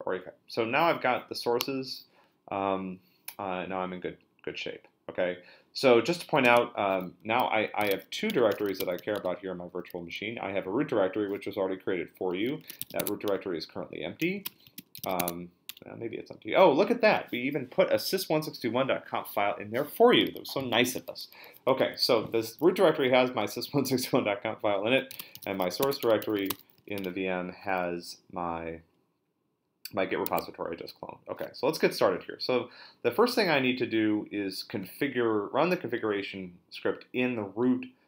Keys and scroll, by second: 6.5 super+Tab, 7.5-9.5 typing, 12.2-15.5 typing, 15.7 Return, 24.8-27.3 typing, 30.3 super+Tab.